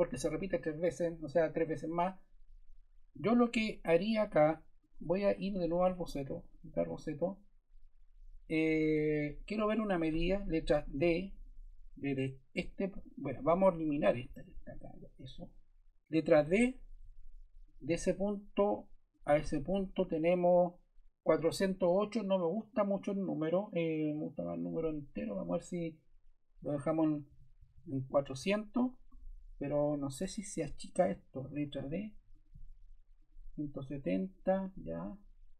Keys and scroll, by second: 10.9 d, 13.7 Escape, 14.8 BackSpace, 16.3 d, 27.2 4, 27.5 0, 28.4 Return, 31.5 d.